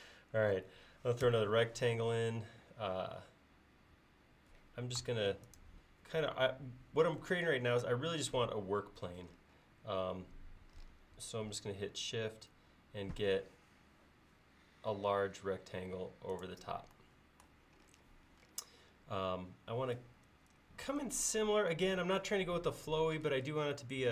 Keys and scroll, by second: 1.3 r.